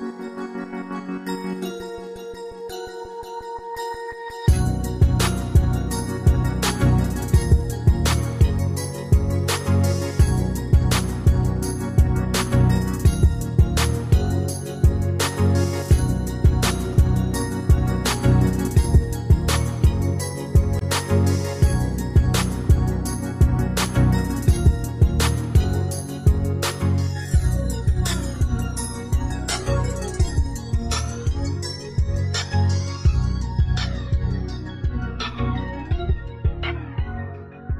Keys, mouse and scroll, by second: 13.9 Escape, 20.2 ctrl+d, 23.1 ctrl+d.